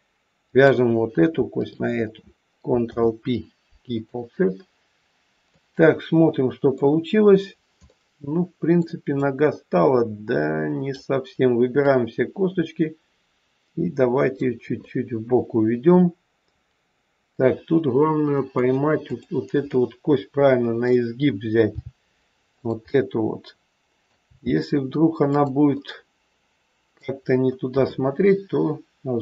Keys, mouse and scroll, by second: 0.4 click, 1.5 shift+click, 2.7 ctrl+p, 4.6-5.0 scroll down 2, 5.4 middle click, 6.8-7.5 scroll down 2, 7.8 middle click, 7.8 scroll down 1, 9.2 click, 11.7 click, 14.7 middle click, 19.0 click, 19.6 middle click, 21.6 g, 22.7 middle click, 24.1 g, 25.8 middle click, 27.2-27.6 scroll down 1, 27.6 middle click.